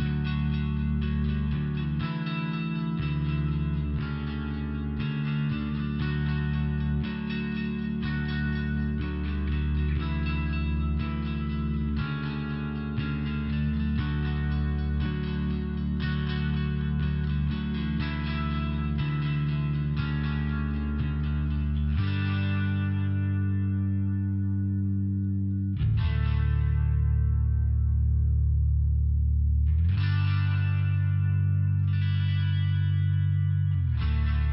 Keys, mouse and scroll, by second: 1.0 click, 1.4 click, 2.5 click, 4.1 click, 5.5 ,, 5.8 click, 14.0 click, 14.1 click, 14.8 click, 15.0 click, 16.2 click, 16.4 click.